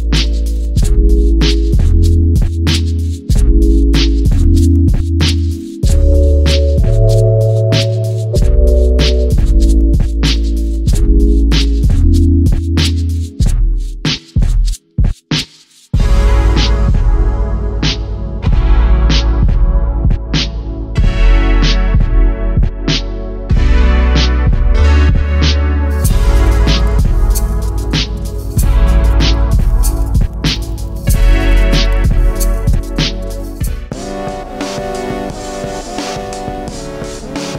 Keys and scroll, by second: 8.2-9.2 typing, 12.5 typing, 16.5 typing, 27.1 g.